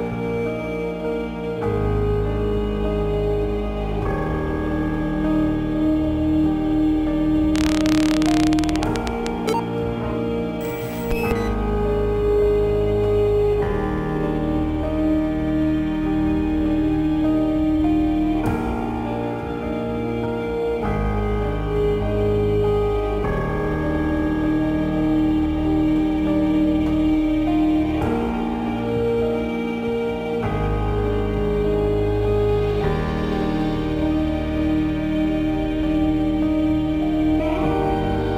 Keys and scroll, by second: 0.3 ctrl+g, 6.6 r, 6.7 space, 6.9 2, 7.2 Return, 12.5 Return, 13.6 space, 15.1 space, 21.6 ctrl+t, 34.0 ctrl+t.